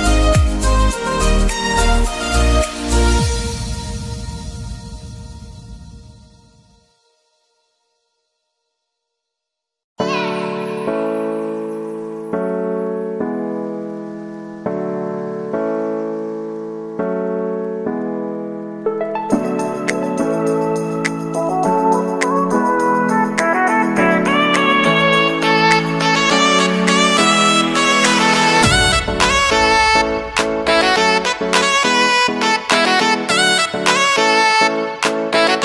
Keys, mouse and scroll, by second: 0.3 p, 1.7 Tab, 2.6 click, 4.1-6.1 drag, 7.5-8.6 middle drag, 8.6 click, 9.5 drag, 9.8-10.8 scroll down 5, 10.8-14.5 drag, 15.4-17.4 drag, 18.3 drag, 18.9-20.4 middle drag, 20.4 scroll down 2, 20.7-22.3 middle drag, 22.3-22.6 scroll up 2, 22.6 click, 23.0-23.5 middle drag, 23.5 Tab, 24.0 shift+middle click, 24.3-25.1 scroll up 3, 25.1 alt+click, 26.1 shift+d, 27.1 p, 27.8 Tab, 28.1 click, 28.5 Tab, 29.0 a, 29.6-31.7 middle drag, 31.7 e.